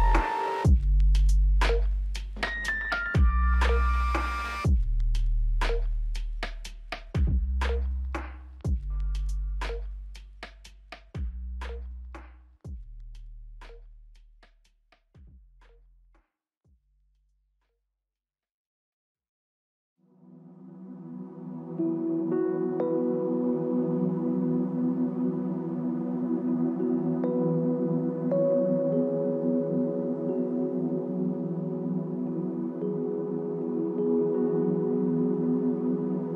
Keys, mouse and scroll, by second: 5.6 double click, 13.0 ctrl+z, 14.0 ctrl+z, 15.5 ctrl+z, 16.9 x.